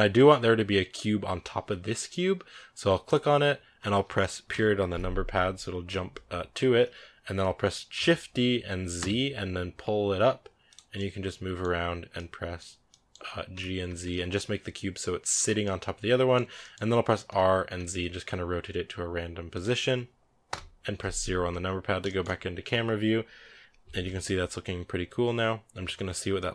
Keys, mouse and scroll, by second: 2.9 right click, 4.3 KP_Decimal, 7.1-7.8 scroll down 2, 7.8 shift+d, 10.8-11.5 middle drag, 11.5-12.0 scroll up 1, 12.0-13.4 middle drag, 13.4 g, 15.3 scroll down 2, 15.5-16.3 middle drag, 16.3 scroll down 2, 16.4-17.1 middle drag, 17.1 r, 20.3 KP_0, 21.4-21.9 scroll down 4, 21.9-26.5 shift+middle drag.